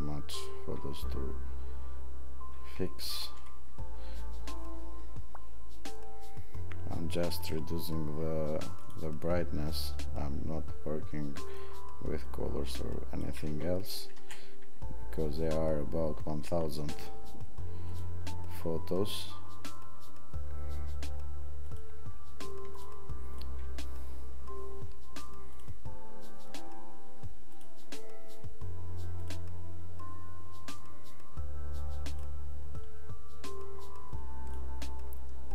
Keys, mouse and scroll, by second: 22.9 click, 23.3 click.